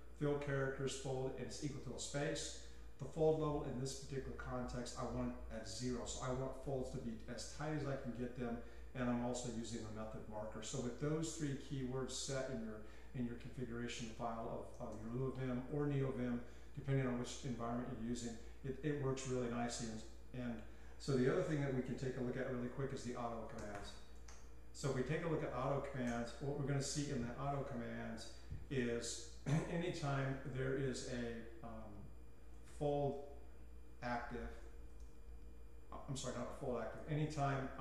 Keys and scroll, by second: 14.0-15.2 typing, 23.6-24.9 typing, 26.1 Return, 32.5-33.3 typing, 34.6-35.4 typing, 37.0-37.8 typing.